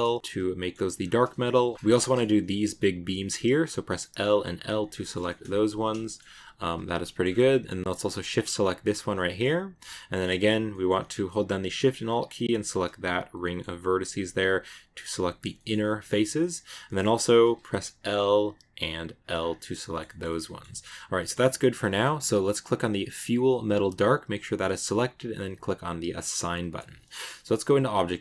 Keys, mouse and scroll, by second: 0.1 shift+middle click, 0.8-1.7 scroll up 1, 1.7 scroll down 3, 1.9 shift+middle click, 2.6-3.8 scroll up 1, 3.8 l, 4.6 l, 4.7 scroll down 1, 4.9-7.1 shift+middle drag, 5.9 scroll up 1, 7.1 scroll up 2, 8.7 shift+right click, 9.0-10.2 shift+middle drag, 10.2 scroll up 2, 10.6-12.4 middle drag, 12.4 alt+shift+right click, 13.2 scroll up 1, 13.3 middle click, 14.0 scroll down 1, 15.0-16.5 middle drag, 16.5 scroll down 2, 17.3 middle click, 17.8 scroll up 1, 17.8 l, 19.0 l, 19.2 scroll down 2, 19.2 scroll up 1, 19.4 middle click, 20.1 scroll up 1, 20.1 middle click, 20.9 scroll down 1, 21.0 middle click, 21.5-22.4 scroll up 2, 22.4-23.0 scroll up 3, 23.1 click, 26.2-27.4 drag, 27.4 Tab, 28.0 z.